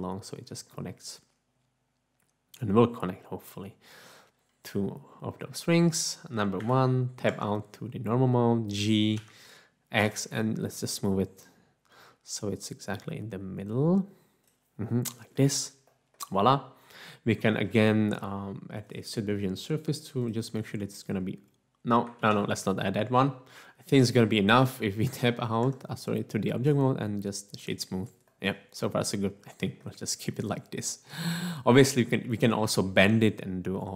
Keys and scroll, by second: 6.6 1, 7.4 Tab, 9.1 g, 10.0 x, 22.2 ctrl+z, 25.2 Tab, 25.7 Tab.